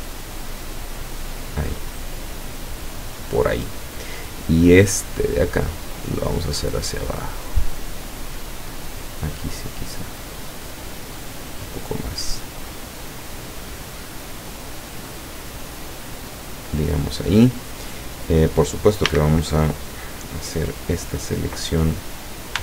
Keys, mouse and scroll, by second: 0.9 scroll up 1, 1.7 scroll up 1, 5.1 right click, 5.8-8.9 drag, 8.9-9.5 scroll up 1, 9.7 scroll down 1, 10.9-11.4 scroll up 1, 11.8 scroll down 1, 13.2 scroll down 2, 13.4-13.9 scroll up 2, 15.1-16.9 drag, 19.2 a.